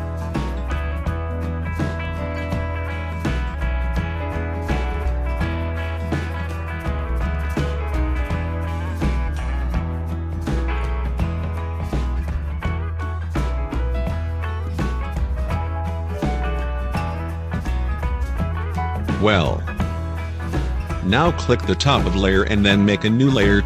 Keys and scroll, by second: 1.9 0, 12.8 2.